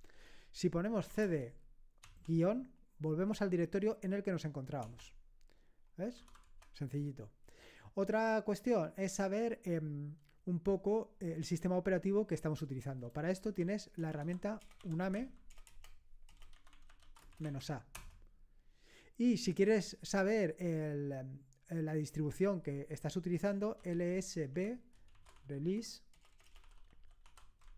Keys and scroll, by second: 0.7-2.0 typing, 4.8 Return, 6.2 typing, 13.4 typing, 14.8-17.9 typing, 18.0 Return, 23.5-27.7 typing.